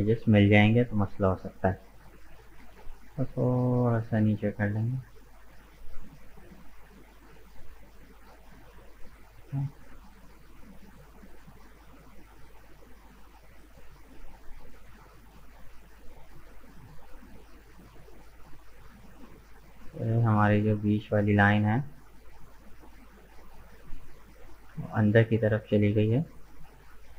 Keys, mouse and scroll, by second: 2.6 g, 7.0-12.5 middle drag, 12.5 right click, 13.2-16.0 middle drag, 16.0 scroll up 2, 17.0 right click, 17.5-18.5 middle drag, 18.5 right click, 20.1 right click, 20.8-23.4 middle drag, 23.4 right click, 24.2-26.7 middle drag, 26.7 shift+right click.